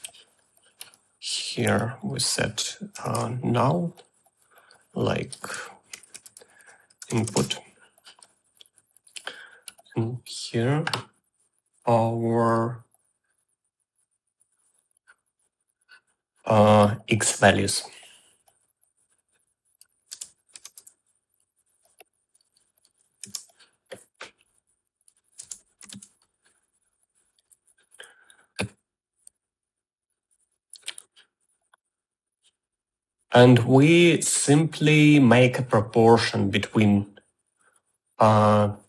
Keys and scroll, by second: 3.3 u, 6.3-7.3 typing, 7.6 Return, 20.5-21.5 typing, 24.0 shift+x, 25.6 Tab, 26.0 m, 26.3 a.